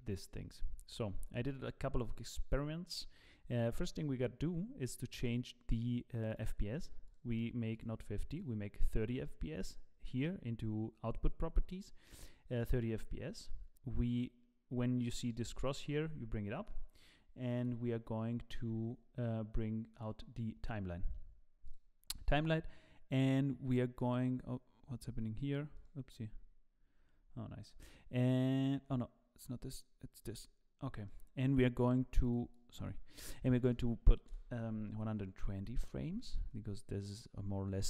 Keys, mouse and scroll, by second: 1.4 click, 5.2 click, 6.3 click, 7.7 click, 15.5 click, 17.5 click, 21.6 click, 35.6-36.0 scroll up 4, 36.0-36.6 scroll down 3, 36.5 scroll up 1.